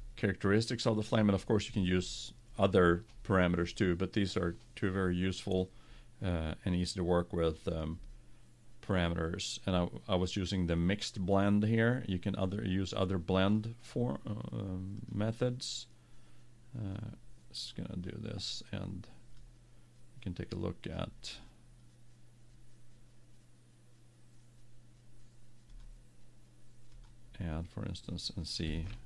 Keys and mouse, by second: 6.8-8.7 drag, 12.9-14.8 drag, 15.4-17.1 drag, 18.0-21.5 drag, 26.1-27.8 drag.